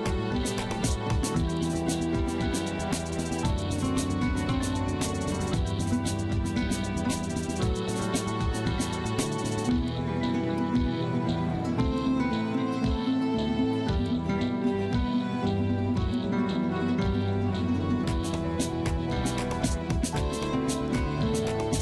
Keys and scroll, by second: 20.1 c, 21.4 c.